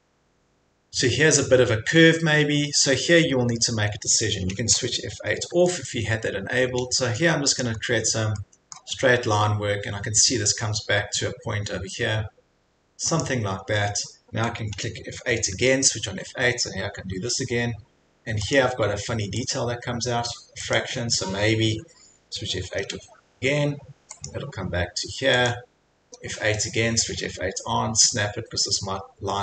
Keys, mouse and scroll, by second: 1.5 scroll, 5.5 F8, 7.6 click, 7.8 scroll, 8.8 scroll, 9.4 scroll, 10.7 scroll, 13.2 click, 13.6 scroll, 15.6 F8, 16.8 scroll, 18.6 click, 19.5 click, 20.8 click, 22.6 F8, 24.3 click, 25.5 click, 26.1 F8.